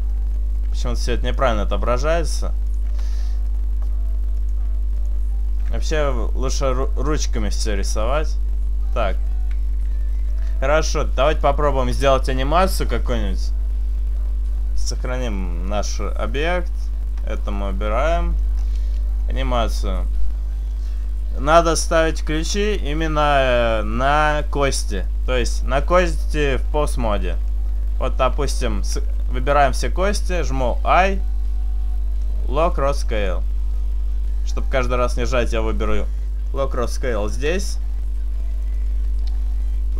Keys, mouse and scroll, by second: 0.5 middle click, 1.6 click, 3.5 right click, 4.4 click, 6.4 r, 7.8 r, 8.9 right click, 9.3 right click, 9.6 r, 11.1 right click, 11.5 click, 16.9 click, 17.2-18.0 scroll down 5, 17.7 middle click, 18.0-18.5 scroll up 1, 19.3 shift+middle click, 19.8-20.6 scroll up 1, 25.0 right click, 30.4 a, 30.8 i, 35.1 click, 38.7 right click.